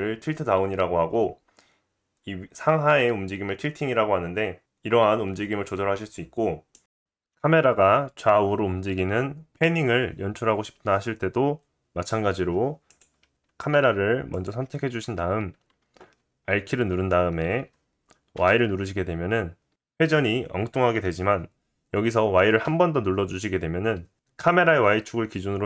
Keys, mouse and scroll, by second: 12.9 click, 13.0-14.3 middle drag, 14.3 click, 14.4-25.6 middle drag, 16.5 r.